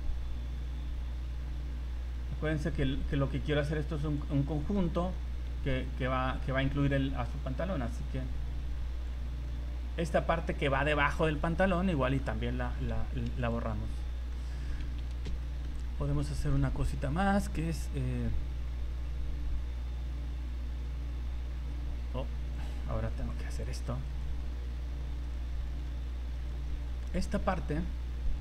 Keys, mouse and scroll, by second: 4.7 middle click, 5.5 c, 10.7 scroll down 2, 11.0 middle click, 12.8 Delete, 14.3 middle click, 14.7-15.0 scroll up 2, 15.4 shift+middle click, 15.8 scroll up 1, 16.3 shift+middle click, 22.5 click, 24.2 click, 25.2 alt+right click, 26.3 alt+right click, 26.7 middle click, 27.1 middle click, 27.8 middle click.